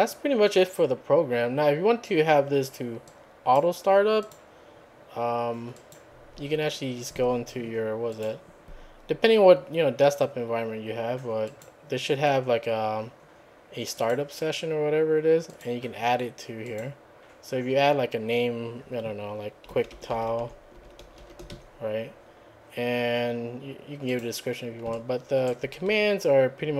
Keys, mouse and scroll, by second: 3.1 click, 4.2 click, 5.7 click, 8.1 click, 11.5 click, 12.5-13.2 scroll down 4, 14.0 click, 15.5 click, 16.6 click, 19.5-22.0 typing, 24.1 click, 25.0 alt+right click, 25.9 alt+`.